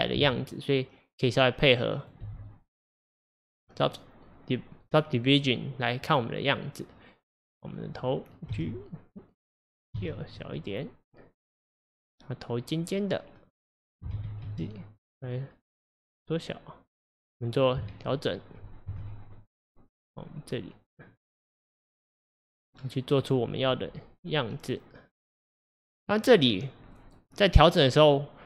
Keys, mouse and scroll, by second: 2.0 click, 2.3 g, 7.4 click, 8.5 g, 17.9 middle click, 18.9 KP_1, 21.2 click, 22.1 click, 22.6-23.3 scroll up 1, 23.3 click, 25.5 click.